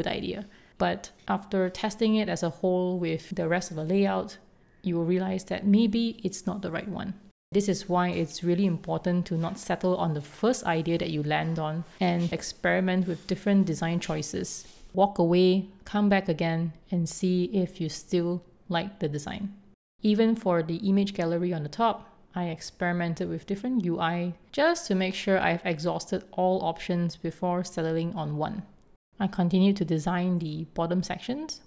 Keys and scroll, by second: 0.9 super+s, 3.4 shift+super+,, 6.4 shift+super+., 7.4 super+s, 10.2 4, 11.5 super+s, 13.2-14.0 typing, 14.1 Return, 14.7 super+s, 18.2 2, 18.3 Return, 19.4 super+s, 21.9 0, 22.1 Return, 23.1 Escape, 23.5 4, 24.5 Return, 25.1 super+d, 27.8 0, 28.5 Return.